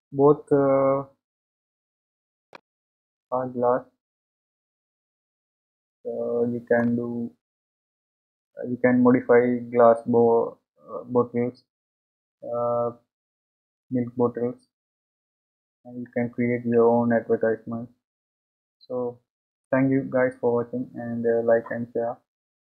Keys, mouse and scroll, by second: 8.3-10.3 scroll down 2, 10.3-18.9 scroll down 1, 18.9 scroll up 1.